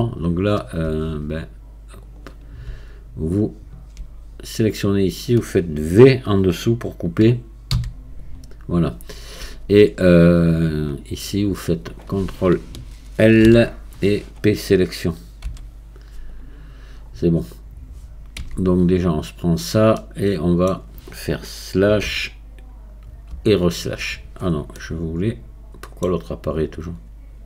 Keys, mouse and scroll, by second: 0.1-1.4 alt+drag, 2.0-4.7 drag, 4.7 scroll down 2, 7.8 v, 11.5-15.4 drag, 15.4 p, 17.0-18.4 scroll down 1, 18.4 Tab, 20.0-22.1 middle drag, 22.1 KP_Divide, 23.3 KP_Divide, 24.5-24.8 scroll up 1, 24.8-26.6 middle drag, 26.6-27.4 drag.